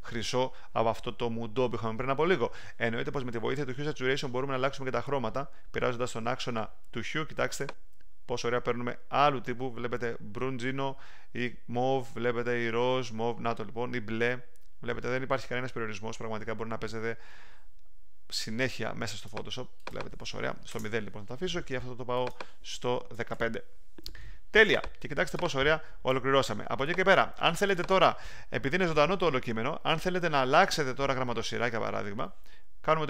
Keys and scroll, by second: 20.7 0, 22.9-23.8 typing.